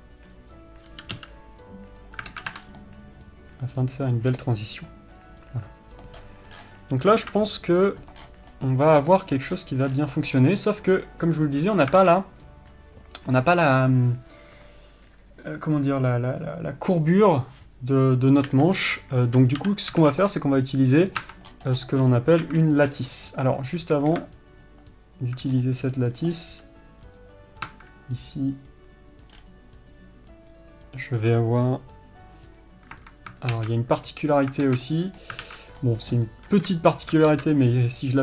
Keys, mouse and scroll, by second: 3.2-10.6 middle drag, 11.0-26.6 middle drag, 34.4-38.2 middle drag.